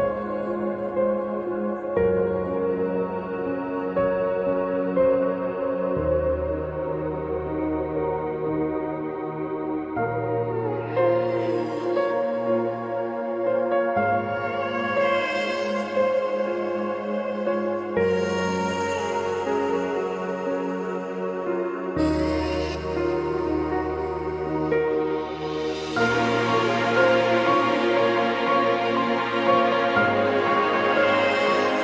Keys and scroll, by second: 3.5 g.